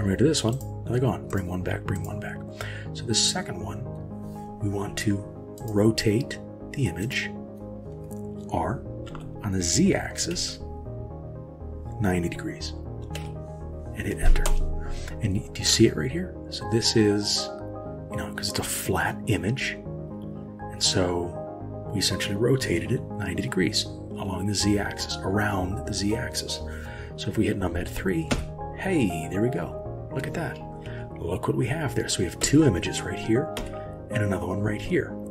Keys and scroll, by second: 9.1 r, 28.3 KP_3, 32.4 KP_1, 33.6 KP_3.